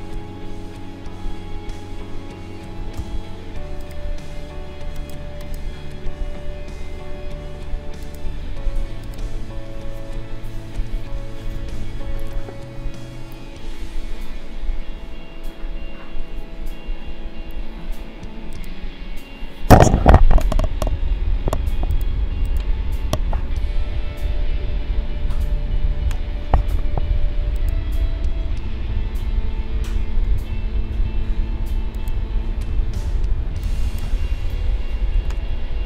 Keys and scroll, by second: 3.0 v, 35.3 0.